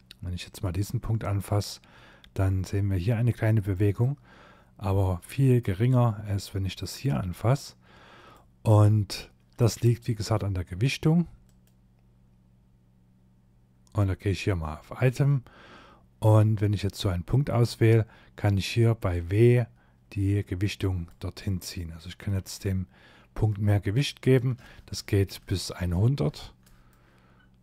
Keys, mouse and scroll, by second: 3.0 click, 5.7 click, 8.6 middle click, 10.4 click, 15.8 middle click, 16.5-17.1 scroll up 3, 18.1 click, 20.5 middle click, 23.0 click, 26.3 scroll down 2, 26.6 middle click, 27.3 shift+middle click.